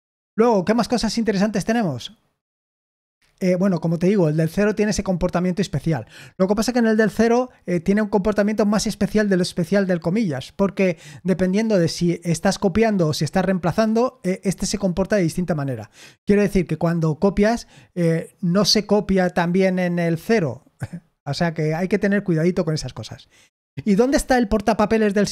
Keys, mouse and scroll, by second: 24.1 Escape, 25.1-25.3 typing.